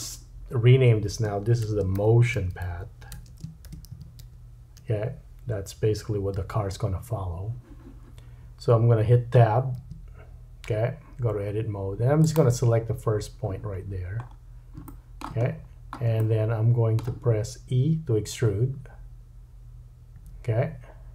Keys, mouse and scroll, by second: 9.8 Tab, 13.9-14.2 scroll down 2, 14.2-14.7 scroll up 2, 14.9 shift+middle click, 15.5-16.0 scroll down 4, 16.2 shift+middle click, 20.2 e.